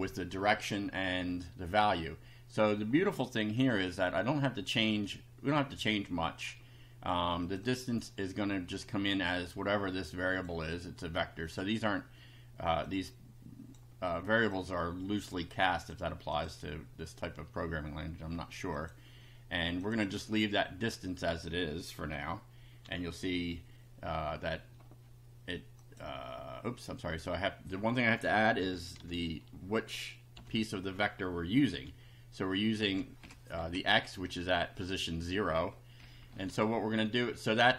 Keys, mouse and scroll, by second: 3.6 click, 7.4 click, 9.7 click, 11.4 click, 12.9-13.9 drag, 14.5 click, 15.3 click, 16.3 click, 18.7 click, 19.8 click, 22.8 F5, 25.8 click, 27.2 click, 28.6 [, 28.9 0, 30.3 ], 31.7 F5, 32.8 Left, 33.5 Right, 33.7 Left, 36.0 Right.